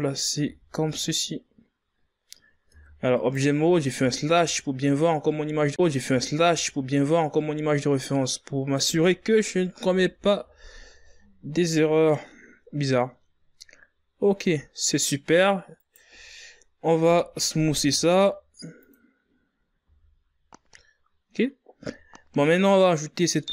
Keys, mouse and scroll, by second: 0.4-2.7 drag, 2.7 scroll down 3, 3.2 z, 3.9 scroll up 1, 4.8 scroll down 1, 5.5 scroll down 1, 5.5 Tab, 6.0 right click, 7.1 KP_Divide, 8.1-8.6 scroll up 8, 10.5 KP_Divide, 11.1 z, 12.9-15.0 scroll down 1, 15.0 scroll down 2, 15.1-16.5 middle drag, 16.5 right click, 17.7 KP_1, 18.5 w, 20.2 scroll up 3, 20.5 a, 21.7-22.5 scroll down 2, 22.5 z, 23.0-23.5 scroll up 4.